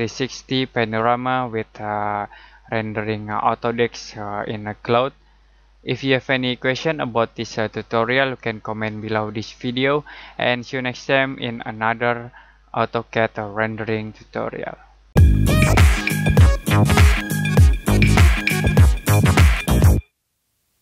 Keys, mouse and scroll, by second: 4.6 click, 9.0 click.